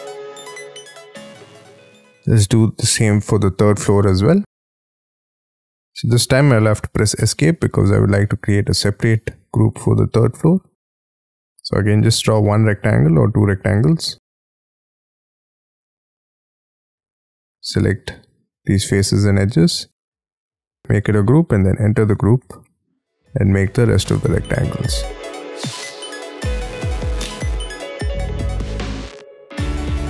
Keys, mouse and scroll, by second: 0.2 j, 0.4 j, 0.5 j, 0.7 scroll down 13, 1.0-1.4 scroll up 15, 1.7 scroll down 2, 1.9 scroll up 6, 2.5 scroll up 4, 2.8-3.6 scroll down 7, 3.6-4.6 scroll up 9, 4.6-5.1 scroll down 7, 5.1 space, 6.1-6.5 scroll down 4, 6.5-7.1 scroll up 5, 7.1 Escape, 7.8-8.3 scroll up 5, 8.3-8.9 scroll down 5, 8.9-9.7 scroll up 10, 9.7 r, 10.6-11.0 scroll down 7, 11.0-15.3 scroll up 9, 15.3-16.1 scroll down 13, 16.1 scroll up 6, 17.3 space, 17.5 scroll up 4, 18.4 double click, 18.6 double click, 18.7 double click, 19.2 scroll down 7, 19.4-20.4 scroll up 6, 20.4 g, 21.2 double click, 21.8 scroll down 4, 22.1 j, 22.4 j, 22.8-23.2 scroll down 6, 23.2 r, 23.4-24.1 scroll up 6, 24.1-25.0 scroll up 6, 25.0-25.4 scroll down 12, 25.4-26.2 scroll up 11, 26.2-26.6 scroll down 13, 26.6 scroll up 12, 27.3 scroll down 1, 27.4-28.1 scroll up 11, 28.1-28.5 scroll down 14, 28.6 scroll up 1, 29.3 scroll up 5, 29.7 scroll down 3.